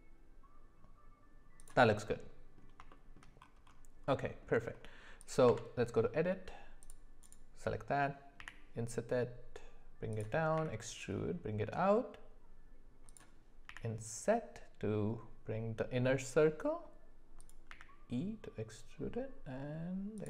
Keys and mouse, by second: 2.1-2.6 middle drag, 2.9 shift+middle drag, 4.1 middle click, 5.4 Tab, 6.8 click, 8.4 i, 10.5 e, 13.6 i, 17.7 e.